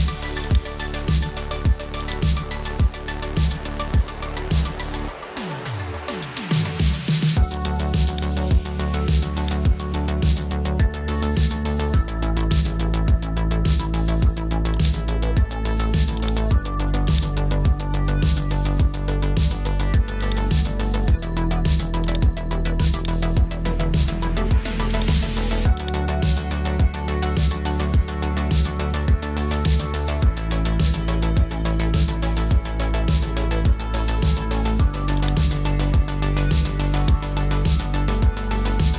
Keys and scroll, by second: 4.4 super+j.